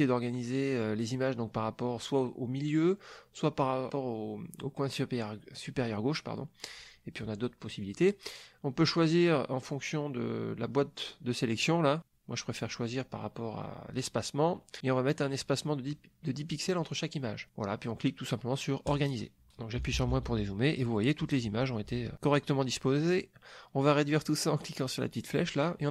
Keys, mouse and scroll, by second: 18.8 click, 19.7 KP_Subtract, 25.3-25.9 drag.